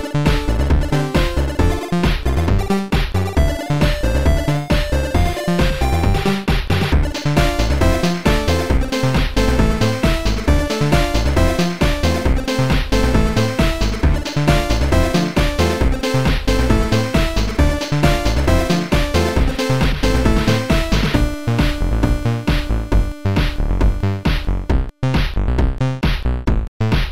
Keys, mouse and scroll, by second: 2.8 click, 3.1 click, 4.6 ctrl+z, 8.4 click, 9.5 ctrl+z, 9.6 click, 11.9 click, 13.6 click, 18.1 click, 19.1 click, 19.6 click, 22.8 click, 23.4 right click.